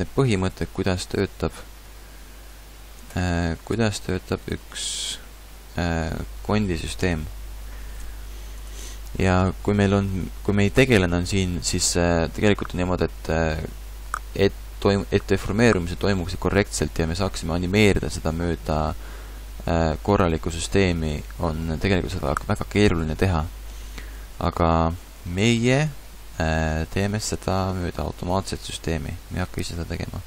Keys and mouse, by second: 3.0 ctrl+Tab, 3.8 x, 4.9 x, 7.0 KP_5, 9.3-10.9 middle drag, 12.5 middle click, 16.2-23.4 middle drag, 25.3 middle click, 27.9 a, 28.1 a.